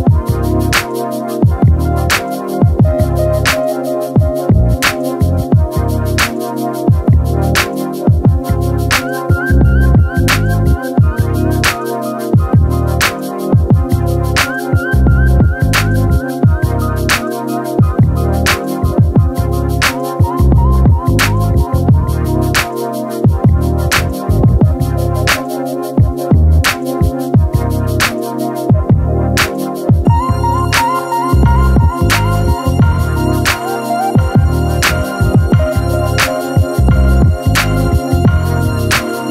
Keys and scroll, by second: 7.0 ctrl+z, 7.1 ctrl+z, 9.9 ctrl+z, 14.7 ctrl+z, 18.2 ctrl+z, 20.6 ctrl+l, 30.3 ctrl+alt+z, 30.9 ctrl+z, 32.0 space, 32.8 ctrl+z, 34.5 ctrl+z, 38.5 space.